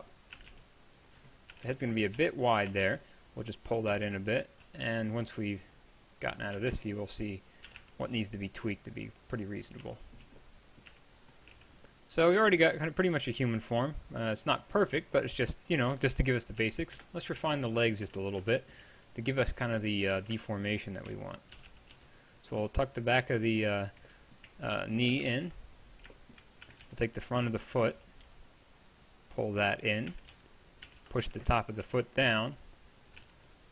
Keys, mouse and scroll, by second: 0.4 a, 0.5 b, 1.5-2.9 typing, 3.9 g, 4.8 middle click, 6.6 a, 6.7 b, 7.7 g, 10.9 Tab, 11.5 z, 14.5 middle click, 16.6 KP_1, 17.0 KP_3, 17.4 z, 18.1 Tab, 20.1 a, 21.1 b, 21.6 g, 25.5 KP_1, 25.5 KP_3, 26.7 a, 26.8 b, 27.8 g, 30.1 a, 30.9 g, 30.9 b, 33.2-33.7 typing, 33.5 click.